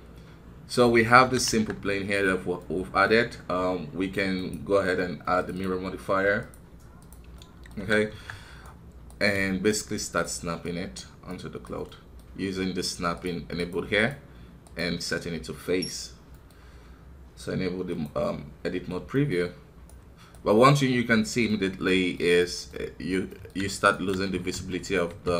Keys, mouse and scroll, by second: 1.2 KP_1, 1.5 Tab, 2.6-4.3 middle drag, 4.3-7.3 drag, 7.3 middle click, 7.8 KP_1, 8.1 Tab, 8.6-9.7 right drag, 11.8-13.6 middle drag, 13.6-16.3 drag, 16.3-19.3 middle drag, 19.3 scroll up 2, 19.8 right click, 20.7-25.3 middle drag.